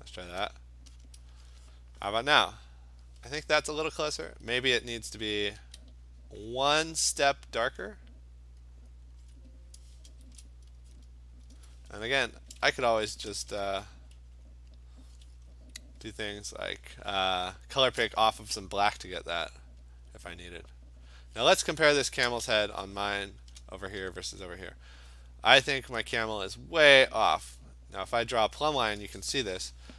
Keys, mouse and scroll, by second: 0.6 click, 1.1 click, 5.1 -, 5.6 -, 7.5 click, 8.9 click, 9.2 \, 10.2 Return, 10.4 click, 11.0 click, 12.9-13.7 typing, 14.5-16.1 click, 20.1-23.5 alt+click, 21.2 click, 22.9 scroll, 23.1-23.6 click, 23.2 click, 23.5 click.